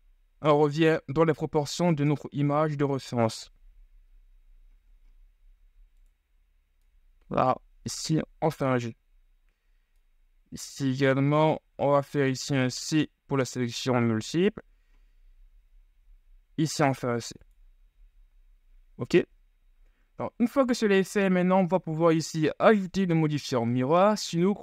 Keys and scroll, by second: 1.6 g, 11.7 ctrl+z, 12.6 c, 14.4 g.